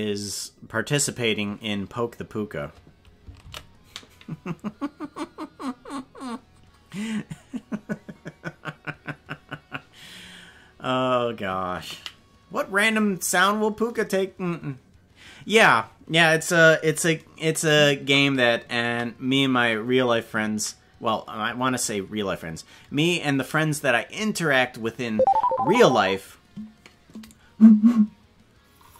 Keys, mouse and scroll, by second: 3.5 ctrl+s.